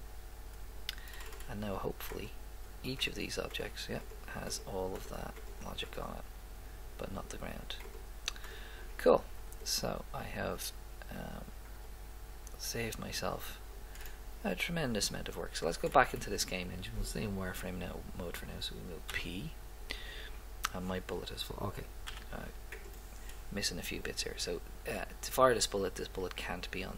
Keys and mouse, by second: 1.2 middle click, 9.5 click, 14.1-16.2 middle drag, 19.1 p, 22.0 p, 22.7-23.8 right drag.